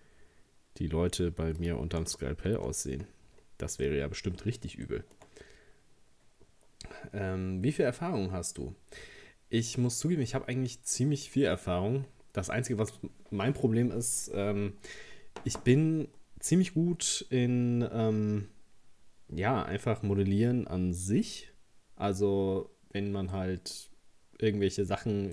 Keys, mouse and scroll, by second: 2.2-2.5 scroll down 1, 2.5 Tab, 3.0-3.8 scroll down 8, 3.8-5.4 middle drag, 5.4-8.5 scroll up 2, 10.3-11.9 middle drag, 11.9-15.0 scroll down 2, 23.3 middle click, 23.8-25.3 scroll up 1.